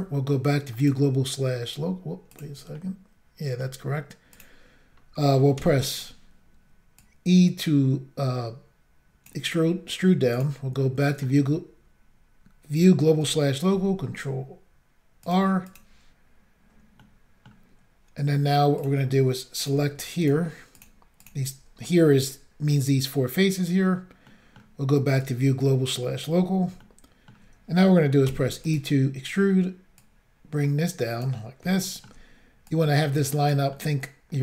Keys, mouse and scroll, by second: 0.8 click, 2.3 click, 2.4 click, 2.8 middle click, 4.4 click, 5.6 e, 6.0 click, 7.0 click, 10.3 click, 10.4 click, 11.0 middle click, 13.7 ctrl+r, 15.3 click, 15.7 click, 15.7 double click, 17.0 middle click, 18.8 click, 19.6 click, 20.2 shift+click, 20.7 shift+click, 21.2 shift+click, 24.3 middle click, 25.2 click, 26.8 shift+middle click, 28.3 e, 28.7 click, 30.0 click, 31.7 shift+middle click, 32.4-32.7 shift+scroll down 1, 32.7 click, 33.7 middle click.